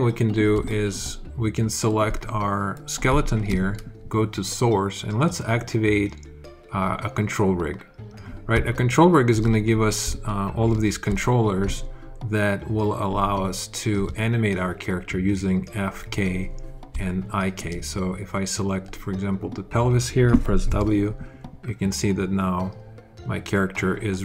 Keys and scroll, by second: 20.5 w.